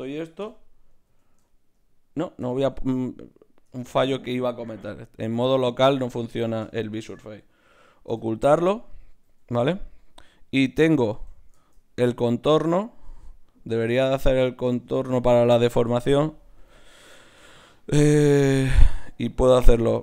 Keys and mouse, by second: 0.4 KP_Divide, 1.0 z, 2.4 Tab, 3.8 Tab, 4.7 KP_Divide, 5.6 z, 6.3-8.8 drag, 8.1 h, 9.2 z, 10.1 click, 10.6 z, 11.1 Tab, 19.6 middle click.